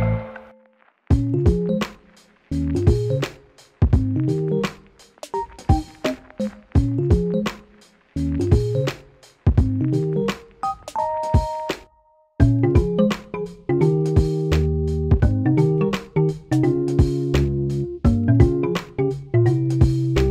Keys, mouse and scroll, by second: 6.5-8.8 alt+drag, 14.2 click, 15.0-16.5 shift+drag, 17.8-20.3 drag.